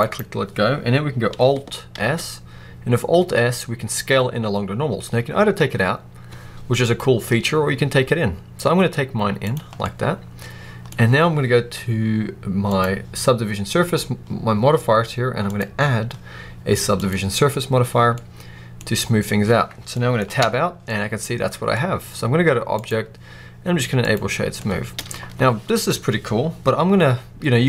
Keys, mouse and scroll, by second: 0.0 right click, 1.9 alt+s, 9.4 click, 9.6 scroll down 2, 9.7-12.5 middle drag, 10.7-12.5 scroll up 2, 12.5 click, 15.4-18.1 drag, 18.1-20.3 middle drag, 19.2-19.8 scroll down 2, 20.3 Tab, 20.6 scroll down 2, 20.8-22.7 middle drag, 22.7-24.5 drag, 24.4 scroll up 2, 24.5-27.6 middle drag, 26.3-27.2 scroll up 2, 27.2-27.6 scroll up 1.